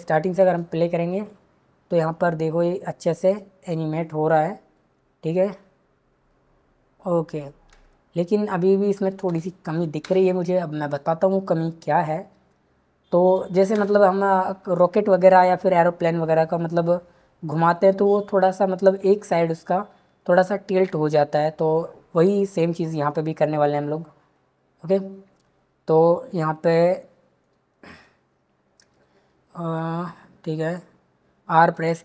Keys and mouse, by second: 0.3 space, 1.1 click, 9.2 space, 13.7 space, 22.4 click.